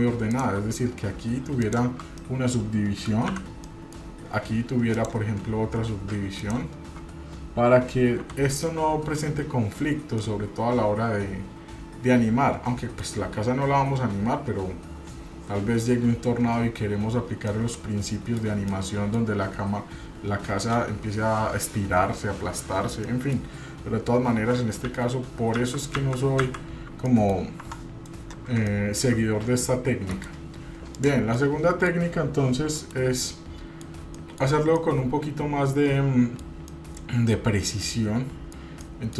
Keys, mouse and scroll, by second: 0.3 click, 1.6 shift+click, 2.2 middle click, 3.3 f, 3.6 middle click, 4.9 click, 6.4 shift+click, 8.2 f, 8.6 middle click, 9.9 scroll down 1, 10.2-13.0 middle drag, 17.4-18.4 middle drag, 18.7 middle click, 23.0 middle click, 24.9 ctrl+z, 25.5 ctrl+z, 25.9 ctrl+z, 26.4 ctrl+z, 27.1 middle click, 27.6 Tab, 28.7-29.0 shift+middle drag, 30.1 KP_Divide, 30.9 click, 31.4-32.0 middle drag, 32.8 KP_Divide, 33.2-33.8 middle drag, 33.8 scroll down 2, 34.1 shift+middle drag, 34.8-36.4 middle drag, 36.7-38.6 middle drag, 38.8 middle click.